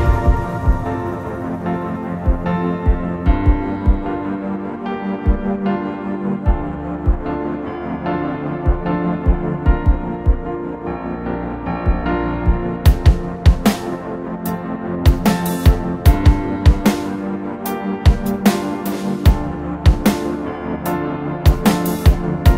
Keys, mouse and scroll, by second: 0.0 middle click, 0.3 scroll down 1, 0.5 middle click, 0.9-1.9 scroll up 2, 1.0 middle click, 1.9 right click, 4.2 middle click, 4.7 scroll up 1, 4.9 middle click, 6.5 scroll down 1, 6.7 middle click, 7.0 scroll up 1, 8.1 r, 12.9 5, 15.9 p, 17.3 middle click, 20.3 shift+click, 20.6 typing, 21.7 Escape, 22.3 shift+click.